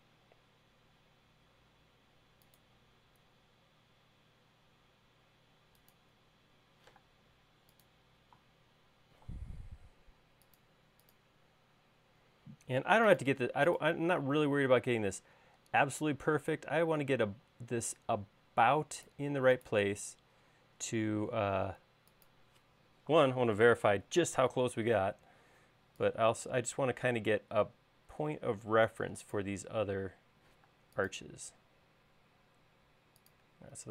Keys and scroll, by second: 7.5 m, 25.7 s, 31.3 m.